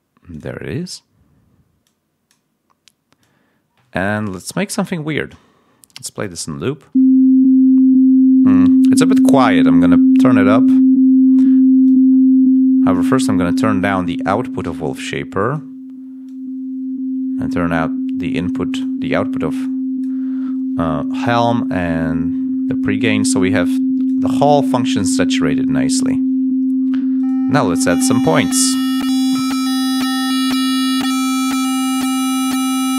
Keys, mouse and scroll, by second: 0.2 click, 3.3-4.3 drag, 6.8 l, 8.9 click, 16.9 click, 18.3 click, 19.5 click, 21.3 click, 27.1 right click, 31.5 click, 32.0 click, 32.8 click.